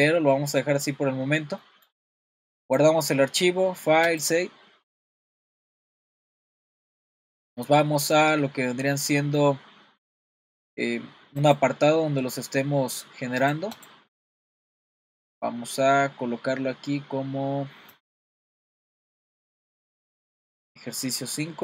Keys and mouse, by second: 0.6 middle click, 1.6 middle drag, 2.8-4.9 drag.